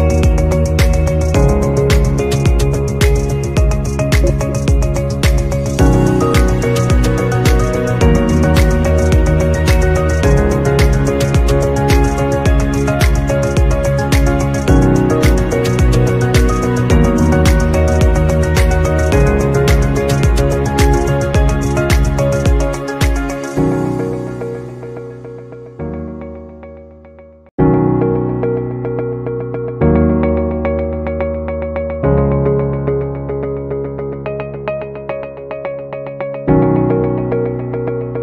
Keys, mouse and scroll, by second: 2.8 double click, 3.6-4.4 typing, 7.0-7.3 typing, 8.4 alt+scroll down 1, 11.0-11.6 scroll down 1, 16.1 Delete, 16.6 Delete, 27.1 ctrl+alt+shift+Return, 32.0 alt+scroll down 1.